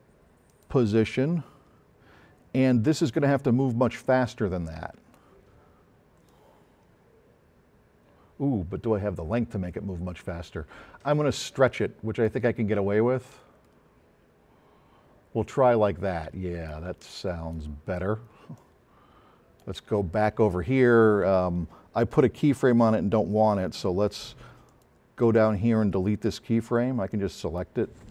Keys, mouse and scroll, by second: 0.5 click, 2.7-5.3 drag, 8.3 KP_0, 15.8-16.9 drag, 24.7 click, 27.1-27.6 drag.